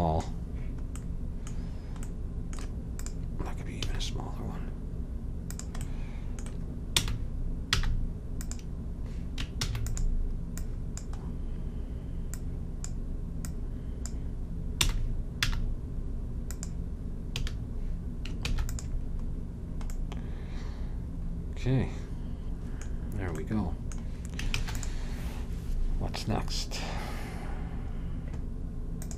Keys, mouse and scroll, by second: 1.1 middle click, 2.2 middle click, 3.1-4.9 drag, 3.9 s, 7.1 r, 9.7 shift+d, 13.0-15.5 drag, 14.9 r, 17.5 a, 18.6 ctrl+s, 24.6 ctrl+s.